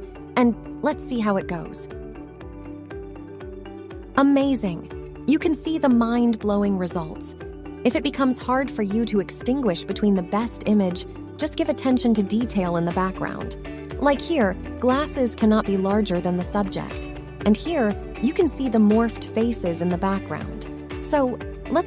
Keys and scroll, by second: 16.8 a.